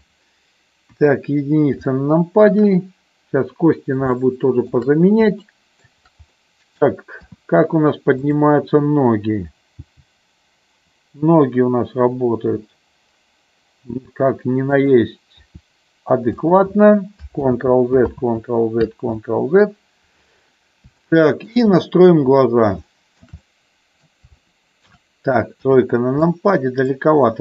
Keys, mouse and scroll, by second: 0.9 KP_1, 1.9 middle click, 4.1 shift+middle click, 5.3 shift+middle click, 6.3 middle click, 7.3 KP_3, 9.8 g, 14.7 click, 15.5 r, 16.3 click, 17.6 ctrl+z, 18.4 ctrl+z, 19.3 ctrl+z, 21.0 shift+middle click, 23.0 shift+middle click, 23.3 middle click, 24.3 shift+middle click, 25.6 KP_3, 26.4 click.